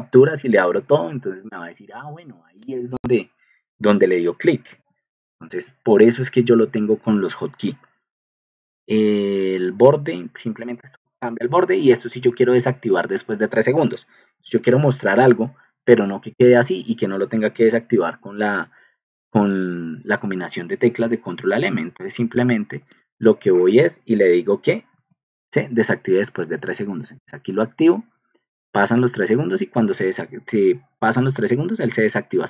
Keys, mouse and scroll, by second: 4.6 alt+Tab, 14.4 ctrl+alt+m, 15.0 ctrl+alt+m, 16.2 ctrl+alt+m, 17.5 ctrl+alt+m, 24.9 ctrl+alt+m, 25.7 ctrl+alt+m, 26.1 ctrl+alt+m.